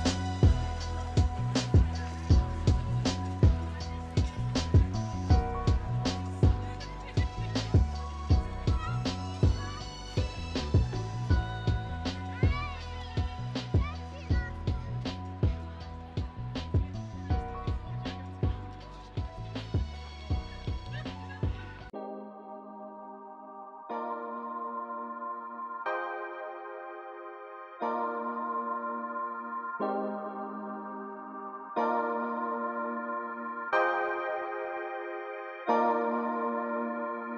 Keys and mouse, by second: 0.0 x, 1.5 click, 2.1 click, 3.6-4.3 middle drag, 10.1-12.1 drag, 14.3 click, 14.8 shift+click, 15.2-15.9 middle drag, 18.7 click, 21.0 ctrl+a, 21.5-22.6 drag, 23.9 click, 24.1 click, 24.9-26.0 drag, 26.5 click, 26.9 ctrl+a, 27.3 click, 28.6 click, 29.4-30.3 drag, 31.3 click, 32.1 click, 33.0 shift+click, 33.9 ctrl+l, 35.7 click, 36.1-36.9 middle drag, 37.2 click.